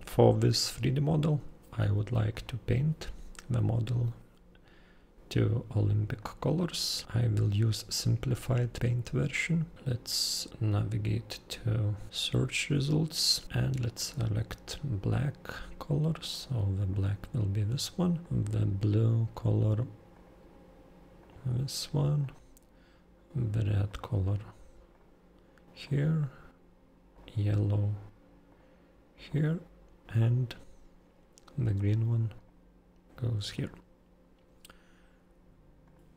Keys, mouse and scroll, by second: 2.3 super+click, 6.2 super+click, 9.4 super+click, 9.7 super+scroll down 1, 10.5-10.9 super+scroll up 1, 10.9-12.1 super+scroll down 1, 12.1 super+click, 13.4 super+click, 14.0 super+click, 15.0 super+click, 16.3 super+click, 16.9 super+click, 18.2 super+click, 20.1 super+click, 21.2 super+click, 22.2 super+click, 23.9 super+click, 24.9 super+click, 25.8 super+click, 27.1 super+click, 28.5 super+click, 29.3 super+click, 30.1 super+click, 31.8 super+click, 32.4 super+click, 33.5 super+click, 35.9 super+click.